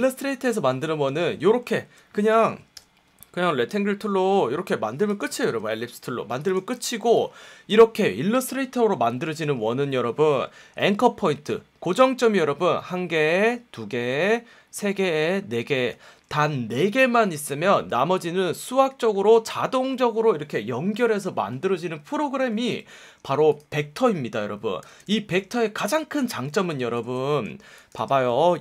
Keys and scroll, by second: 1.0 F1, 1.6 v, 2.4 BackSpace, 2.7 l, 5.3 v, 6.7 a, 10.8 F1, 15.9 F1, 22.5 v, 24.8 super+-, 26.9 super+-, 27.4 space, 28.0 v.